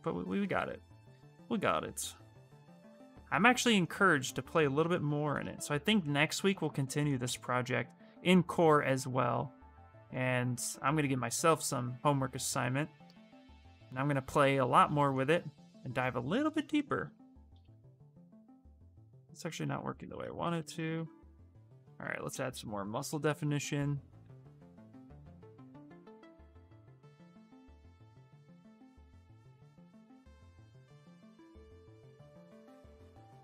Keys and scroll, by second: 17.4 ctrl+z, 17.6 ctrl+z, 18.0 ctrl+z, 18.3 ctrl+z, 18.5 ctrl+z, 18.9 ctrl+z, 19.7 ctrl+z, 19.9 ctrl+z, 20.1 ctrl+z, 20.3 ctrl+z, 20.5 ctrl+z, 22.2-23.3 typing.